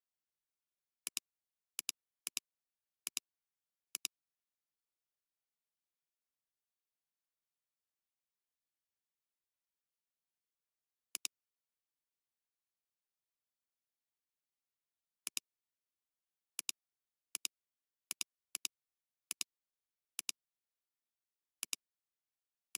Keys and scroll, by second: 8.4 space.